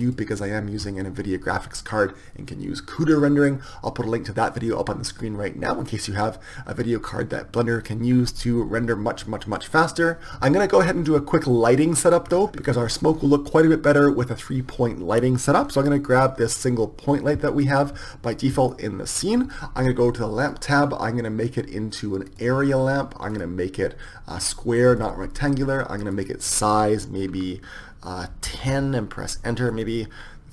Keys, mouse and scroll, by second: 12.0 middle click, 16.3-17.5 right drag, 17.4 click, 17.5-20.2 middle drag, 20.2-30.5 drag.